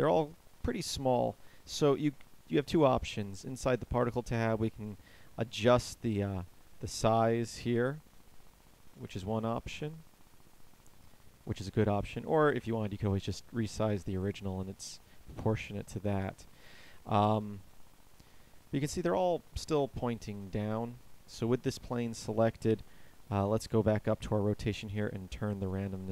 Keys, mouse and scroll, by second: 18.0 alt+a, 20.2 Escape, 23.7-26.1 middle drag.